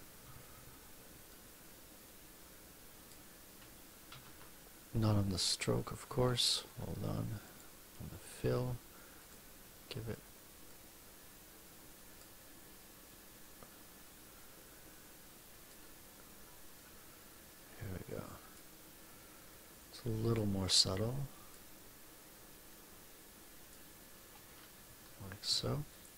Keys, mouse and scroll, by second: 0.1 F2, 1.2-3.2 drag, 4.0 ctrl+z, 6.0 ctrl+z, 7.4 click, 10.6-12.3 drag, 13.0-15.8 drag, 16.7-18.7 drag, 19.5 click, 20.9 click, 22.6-23.8 drag, 25.4 F1, 25.9 click.